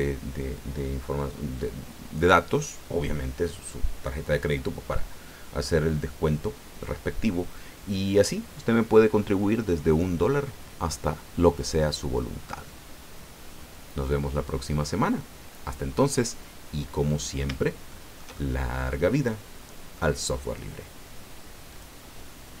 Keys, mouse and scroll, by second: 17.9-20.1 shift+middle drag, 21.7 click.